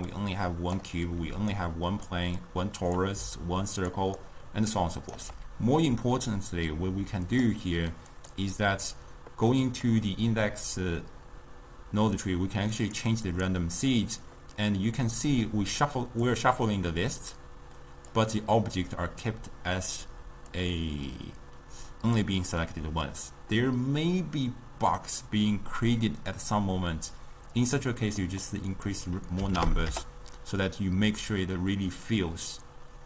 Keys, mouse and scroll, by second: 0.0-4.1 typing, 0.2 click, 1.7 click, 2.5 click, 4.0 click, 4.3 right click, 5.2 d, 5.3 d, 7.3-8.0 drag, 8.2 click, 9.6-12.6 middle drag, 12.8-19.3 drag, 20.6-28.0 drag, 28.0 middle click, 28.8-33.0 drag.